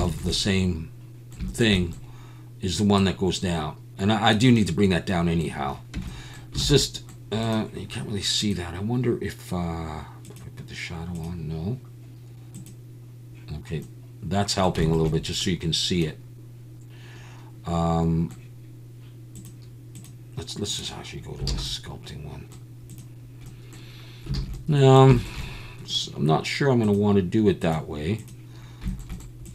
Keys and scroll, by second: 5.9 Tab, 6.6 alt+a, 21.5 alt+a, 24.3 alt+a.